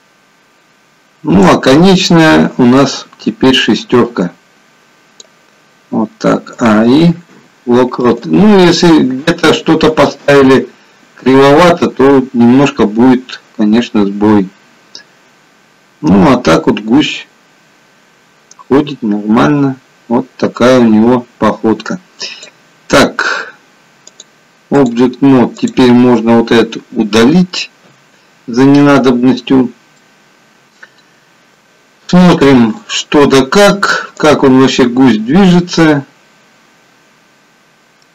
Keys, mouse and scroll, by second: 3.1 click, 10.0 click, 25.6 click, 27.8 Delete, 30.0 middle click, 32.7 click, 34.2 click, 36.0 middle click.